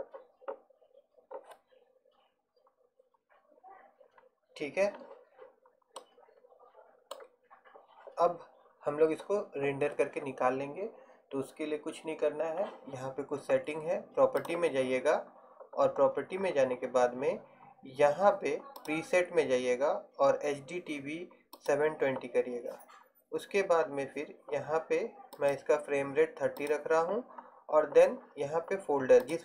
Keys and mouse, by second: 7.8-11.8 middle drag, 14.5-29.3 drag.